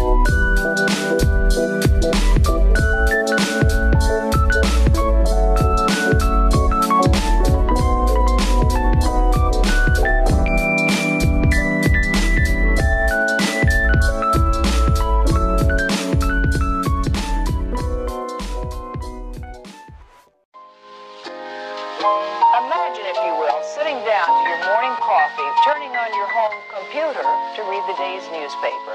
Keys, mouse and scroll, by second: 0.3-5.9 middle drag, 5.9 space, 6.4-8.3 drag, 8.3 z, 9.1-11.2 middle drag, 11.2 click, 11.7-13.4 shift+middle drag, 13.4 click, 13.5 g, 14.5 click, 14.7 g, 15.5 click, 15.6 g, 16.5 click, 16.7 g, 17.4 click, 17.6 g, 18.9 click, 19.2 g, 20.6 click, 21.8 click, 22.1 space, 22.6-27.4 middle drag, 27.4 space.